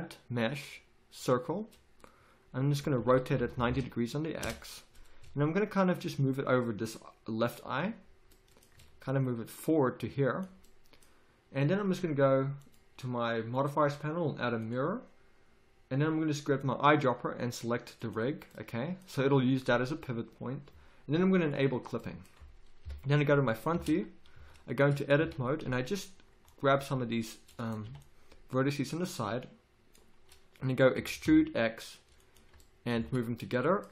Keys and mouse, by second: 3.0 r, 5.2 z, 5.8-7.8 drag, 8.8 z, 10.6-11.9 drag, 12.6-18.6 drag, 21.5-22.8 drag, 22.8 KP_1, 23.7 Tab, 24.3 z, 25.2 a, 25.6 c, 27.7-30.9 drag, 27.8 b, 30.9 e, 33.0 z.